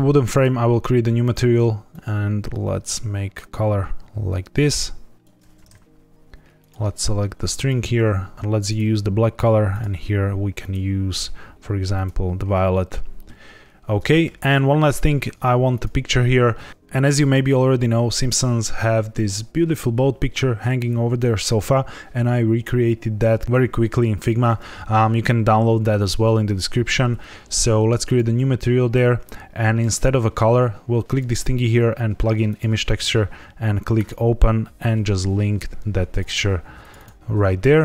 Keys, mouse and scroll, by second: 0.3 click, 1.1 click, 6.5 click, 7.5 click, 8.3 ctrl+z, 8.3 click, 9.6 click, 10.5 click, 14.2 ctrl+s, 14.9 click, 15.6 click, 28.0 click, 32.6 click, 32.7 click, 33.9 click.